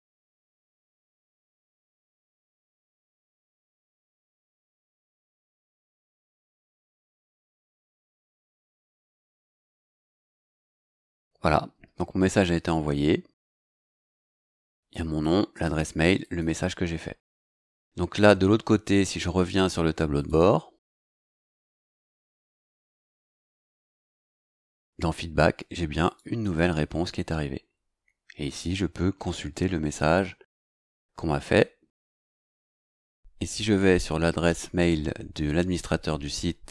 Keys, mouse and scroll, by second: 0.0-0.5 typing, 0.6 scroll down 2, 0.9 scroll up 2, 1.7 scroll down 2, 1.7 click, 2.8 scroll down 2, 3.8 click, 4.4-5.9 typing, 6.8 scroll down 2, 8.6 click, 14.9 click, 15.6 click, 16.2 click, 20.1 click, 26.0 click.